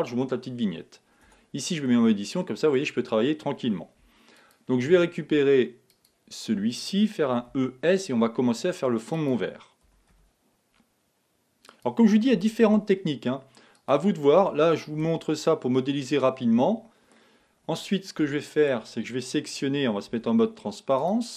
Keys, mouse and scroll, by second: 1.6 Tab, 1.9-4.4 middle drag, 4.4 alt+click, 6.0 alt+click, 7.3 e, 9.9 e, 12.4 e, 15.0 f, 15.5-18.2 middle drag, 18.2 KP_1, 20.1 z.